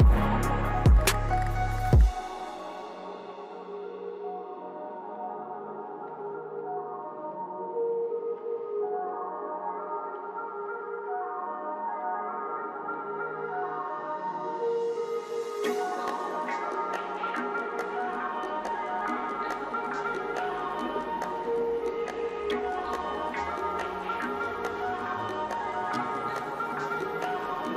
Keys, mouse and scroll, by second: 2.8 scroll up 1, 4.3-8.6 drag, 8.6 right click, 9.9-10.2 scroll up 1, 14.1 scroll down 1, 18.7-19.0 scroll down 1, 19.5-25.8 drag.